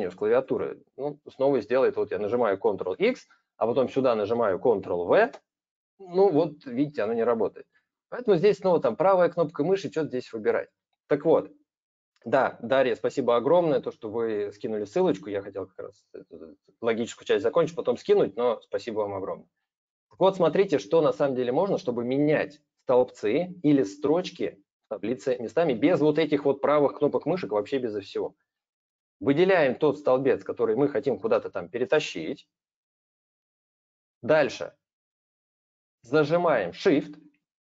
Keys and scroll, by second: 2.8 ctrl+x, 5.1 ctrl+v, 7.3 ctrl+z.